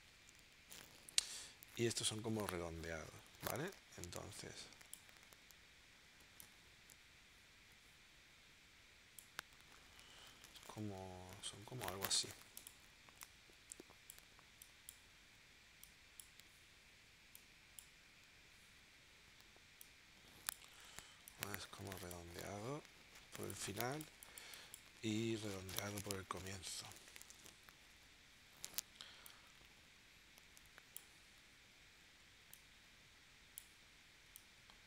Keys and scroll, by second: 12.0 a, 23.7 space, 25.5 v, 27.2 shift+w.